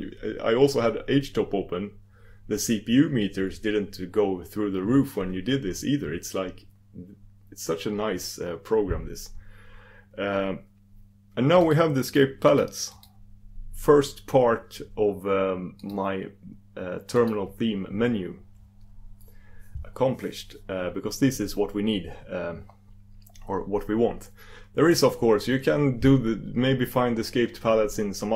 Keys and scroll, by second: 15.9 super+d, 18.3 super+d.